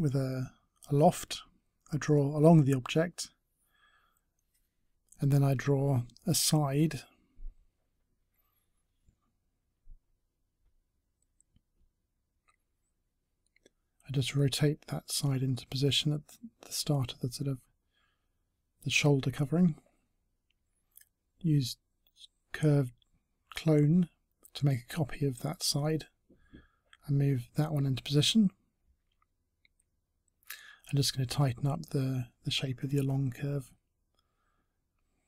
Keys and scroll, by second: 15.0 e, 17.2 w, 22.1 e, 28.0 space, 33.4 t.